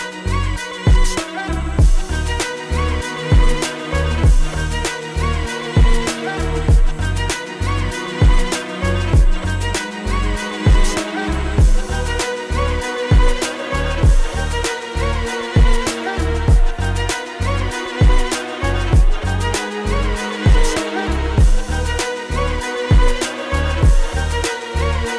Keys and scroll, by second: 8.1 space, 12.7 space, 13.9 ctrl+z, 17.6 space, 18.2 ], 20.4 space, 22.9 space.